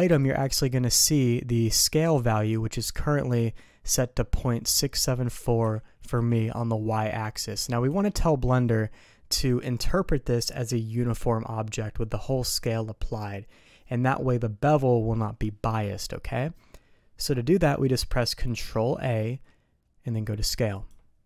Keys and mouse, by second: 0.3 click, 5.6 s, 19.1 ctrl+a.